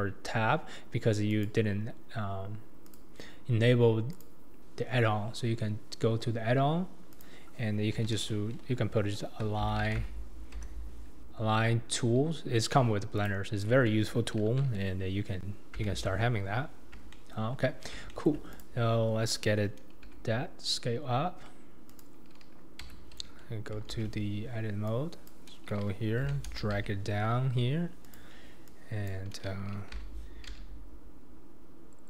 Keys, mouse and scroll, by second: 1.3 click, 2.9-6.0 drag, 15.8 n, 16.6-17.1 scroll up 2, 17.1-17.7 shift+middle drag, 17.7-18.1 scroll down 2, 18.1-18.5 shift+middle drag, 18.5 click, 20.0 s, 22.9 Tab, 23.9 alt+z, 24.9 click, 26.2 g, 29.1 click, 30.0 g.